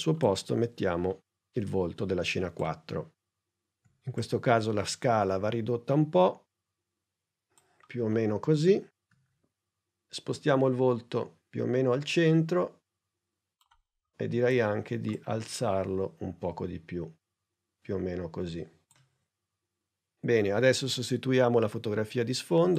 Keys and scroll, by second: 3.8 s, 9.0 p.